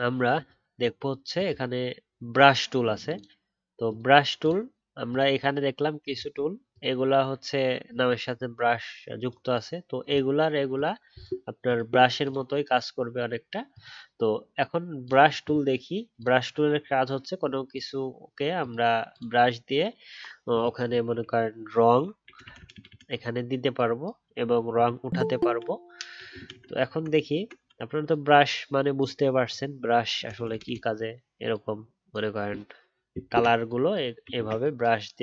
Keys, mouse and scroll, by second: 34.3 ctrl+z.